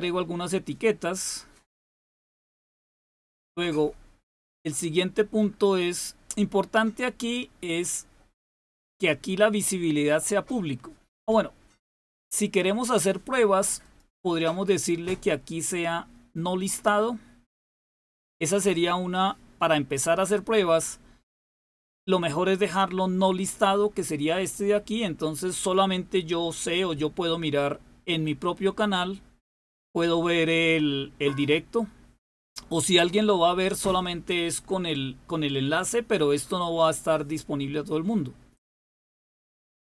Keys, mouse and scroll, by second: 0.8-1.5 scroll up 1, 1.5-3.8 scroll up 1, 3.8-4.9 scroll up 1, 4.9-5.4 scroll up 1, 5.4-7.4 scroll up 1, 7.4-7.9 scroll down 2, 7.9-13.7 scroll down 1, 13.7-14.8 drag.